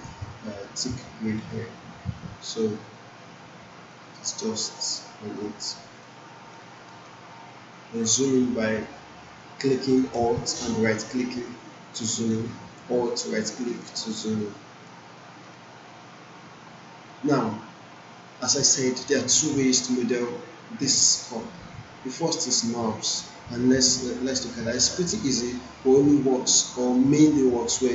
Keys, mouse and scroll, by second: 1.4-4.2 drag, 6.1-6.7 alt+right click, 6.9 alt+middle click, 7.5-8.4 right drag, 11.1-12.3 alt+right drag, 13.2-13.9 alt+right click, 14.1-15.1 alt+middle drag.